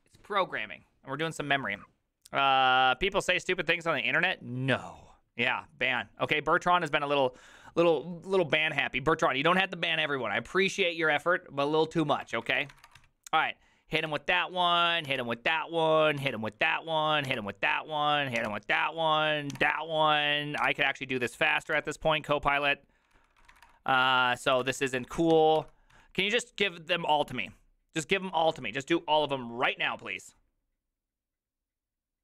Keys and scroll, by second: 12.6-13.5 typing, 14.1 Tab, 14.1 Return, 15.1 Tab, 15.2 Return, 16.3 Tab, 16.3 Return, 17.3 Tab, 17.4 Return, 18.4 Tab, 18.5 Return, 20.7 Tab, 21.8 Return, 23.2 ctrl+c, 23.3-26.0 typing, 25.4 Tab, 25.6 ctrl+c.